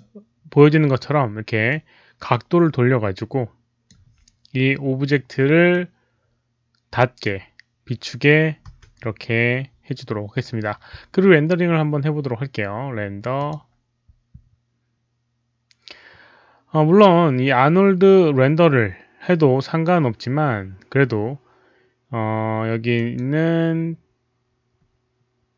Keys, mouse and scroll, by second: 1.6-3.8 drag, 5.7-7.2 drag, 8.7 w, 12.5 click, 12.5 w, 13.3 click, 15.5 click, 15.5 w, 20.9 click.